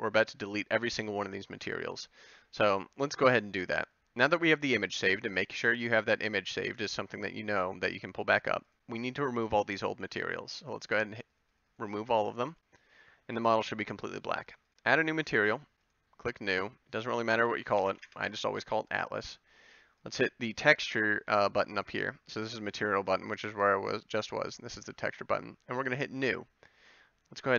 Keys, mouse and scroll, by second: 1.9 KP_Decimal.